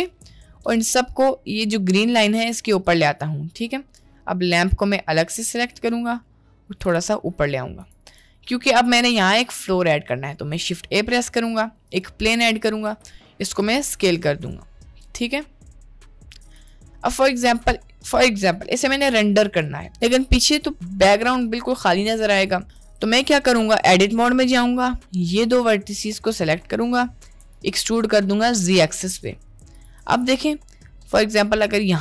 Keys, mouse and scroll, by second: 0.3 a, 0.6 g, 4.9-5.4 drag, 6.8 g, 8.4-8.7 middle drag, 9.0 middle click, 10.5 shift+a, 13.2 s, 17.2 middle click, 19.5 middle click, 20.3 middle click, 21.8-22.2 middle drag, 22.8 Tab, 24.3 middle click, 25.4 click, 26.5 middle click, 27.5 e, 30.3 Tab, 30.3-30.7 middle drag, 31.1-31.7 middle drag.